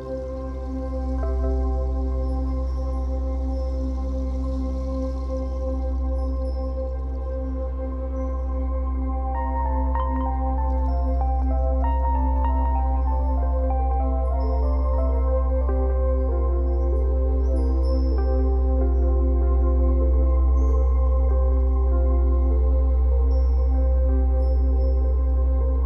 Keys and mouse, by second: 1.8 ctrl+alt+click, 3.4 ctrl+alt+shift+click, 5.2 click, 6.0 click, 7.4 Right, 7.5 Right, 8.6 s, 12.2 i, 13.2 click, 13.9 click, 14.4 click, 14.5 typing, 16.3 typing, 17.9 click, 18.5 click, 20.5 click, 21.5 click, 22.3 typing, 22.5 Return, 23.4 i, 24.2 space, 24.9 space.